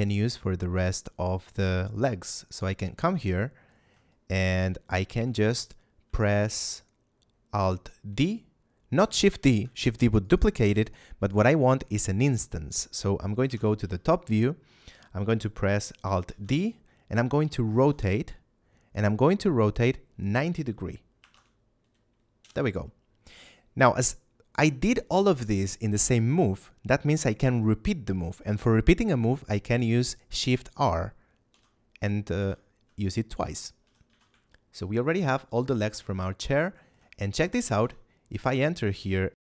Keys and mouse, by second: 2.3 right click, 2.9 shift+middle click, 4.5 shift+middle click, 6.2 shift+middle click, 9.5 shift+d, 10.1 click, 10.5 x, 10.7 click, 11.2 right click, 13.3 KP_7, 13.7 z, 16.2 alt+d, 17.7 r, 21.1 9, 21.2 0, 22.3 Return, 31.4 shift+r, 32.3 shift+r, 33.7 a, 34.0 z, 34.4 shift+middle click, 35.7 middle click, 36.1 shift+middle click, 37.3 right click, 37.7 Tab, 39.1 middle click.